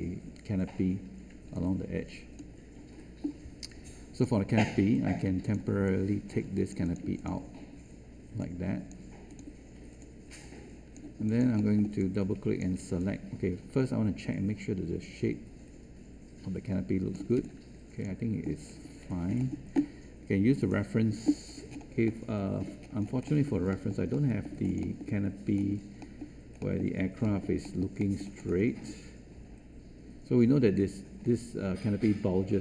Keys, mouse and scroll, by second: 17.3 space.